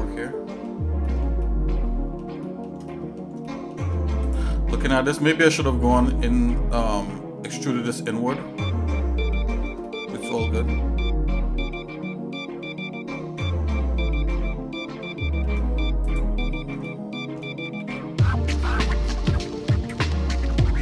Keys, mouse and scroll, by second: 0.3 middle click, 1.1 shift+middle click, 1.4 shift+middle click, 2.4 shift+middle click, 2.9 middle click, 3.4 shift+middle click, 4.2 click, 4.7 Tab, 5.6 shift+middle click, 6.2 scroll up 1, 9.9-15.5 shift+middle drag, 16.3 click, 16.8 shift+middle click, 17.8 ctrl+z, 19.3 ctrl+KP_Subtract, 20.0 ctrl+KP_Subtract.